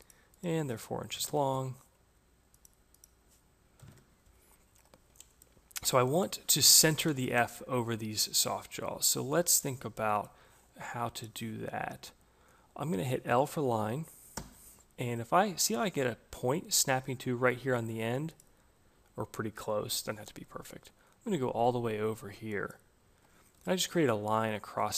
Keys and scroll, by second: 0.6 Return, 3.6 4, 3.7 Return, 13.7 l, 22.9 Escape.